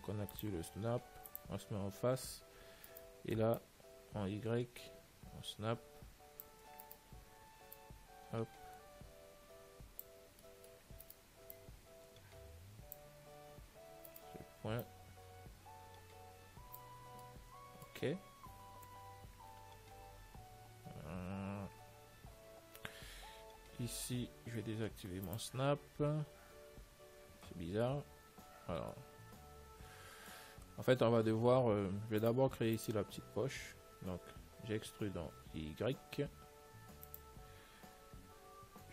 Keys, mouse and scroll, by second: 0.0-2.3 drag, 2.4 middle click, 3.2-5.1 right drag, 3.8 click, 7.1-8.8 right drag, 8.1 click, 9.6 click, 10.0 click, 10.7-12.6 middle drag, 11.3-13.2 right drag, 11.8 click, 13.8 z, 14.4-16.2 right drag, 14.7 z, 15.1 click, 17.5-19.4 middle drag, 20.3 z, 20.6-24.6 middle drag, 21.2 z, 25.6 click, 29.1-31.1 middle drag, 32.5-35.0 right drag, 35.0 e.